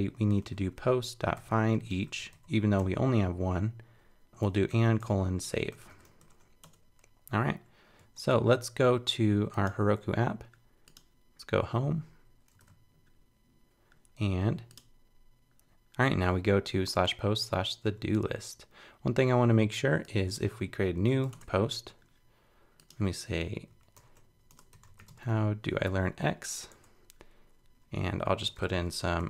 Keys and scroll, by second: 8.0 super+Tab, 12.6 super+r, 28.5 super+t.